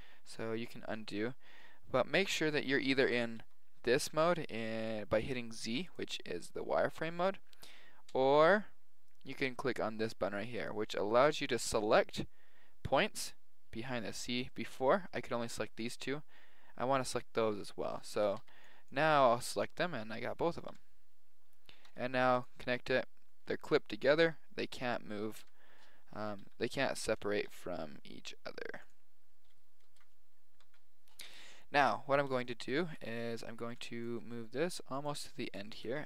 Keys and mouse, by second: 0.0 ctrl+z, 3.4 z, 5.8-7.7 drag, 8.1 z, 10.6-12.0 drag, 12.0-14.0 middle drag, 12.2 click, 17.7 KP_7, 18.2 a, 18.4 b, 19.5-21.4 middle drag, 20.7 KP_7, 21.9 g, 23.5 middle click, 24.2 g, 25.5 KP_7, 26.4 g, 27.6 g, 29.8 ctrl+shift+z, 30.7 ctrl+z, 32.4-35.1 middle drag, 33.5 a, 33.6 b, 34.1 g, 35.3-36.0 middle drag.